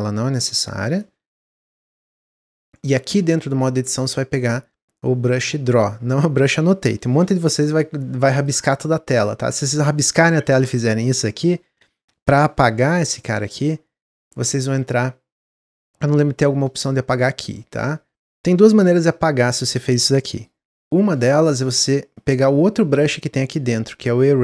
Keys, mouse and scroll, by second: 1.6 Tab, 2.0 Tab, 5.6-11.7 drag, 19.4-24.4 drag.